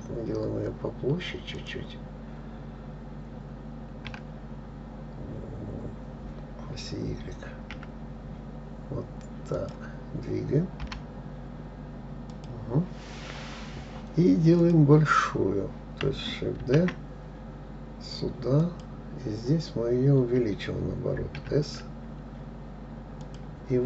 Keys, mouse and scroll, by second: 4.5 s, 11.2 g, 15.0 click, 17.0 shift+d, 21.8 s.